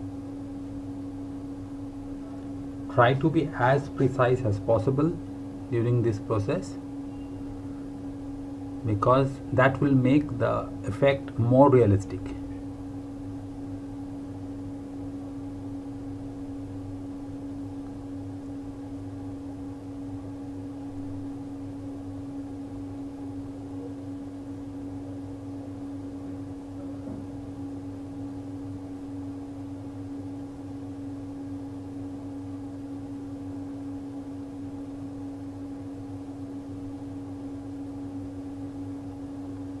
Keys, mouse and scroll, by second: 1.5 scroll down 1, 2.0 scroll up 1, 2.7-3.4 scroll down 1, 4.3 ctrl+Num_Lock, 4.5 ctrl+KP_0, 5.4 click, 7.7-8.3 scroll up 1, 8.5 scroll up 1, 9.2 scroll up 1, 10.3-11.0 typing, 11.6 shift+Num_Lock, 11.7-12.8 shift+scroll up 3, 13.8-14.8 scroll up 5, 14.8 scroll down 1, 16.3 scroll up 1, 18.0 f, 19.2 shift+Num_Lock, 19.2-19.9 scroll up 2, 21.0 ctrl+c, 21.5-22.3 shift+scroll up 3, 22.3 shift+scroll down 1, 22.8 shift+scroll up 1, 24.5 click, 27.4 space, 27.6 click, 27.6 space, 29.8 click, 32.6 scroll down 1, 33.3 space, 34.7-36.0 scroll down 1, 36.1 space, 36.2 click, 36.2 space, 37.2 scroll up 1, 38.8-39.3 scroll up 1, 39.4 scroll down 1.